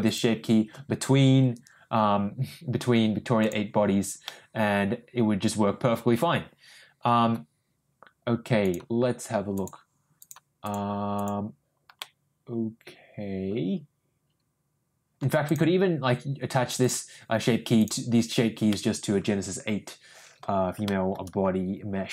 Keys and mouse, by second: 0.1 click, 4.2-7.0 middle drag, 9.6 click, 10.6 click, 11.9-15.3 middle drag, 15.5 click, 16.8 click, 17.8 click, 18.7 middle click, 19.5 middle click, 19.8 middle click, 20.8 shift+middle click.